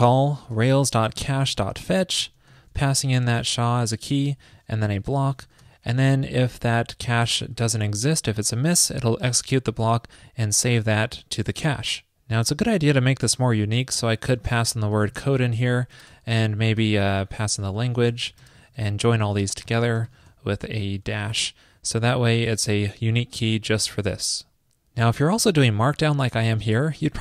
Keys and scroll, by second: 0.0 super+Return, 2.1 super+Return, 5.1 super+Left, 5.5 super+Right, 7.7 alt+Left, 7.8 alt+Left, 14.2 alt+Left, 20.9 alt+Right.